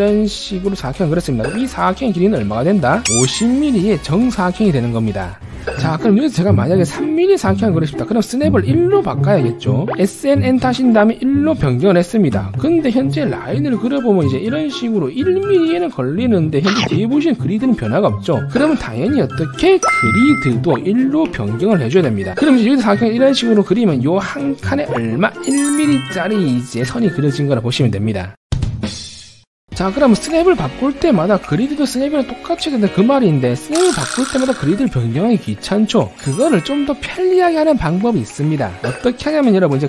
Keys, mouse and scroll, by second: 0.4 click, 1.0 click, 2.0 click, 2.2 click, 10.1 s, 11.7 1, 13.6-13.9 scroll up 2, 14.1 1, 14.4 right click, 14.7 scroll down 1, 19.6-21.4 typing, 23.2 middle click, 23.5 1, 23.8 right click, 24.5 click, 25.0 click, 25.6 click, 26.1 click, 27.0 click, 27.2 right click.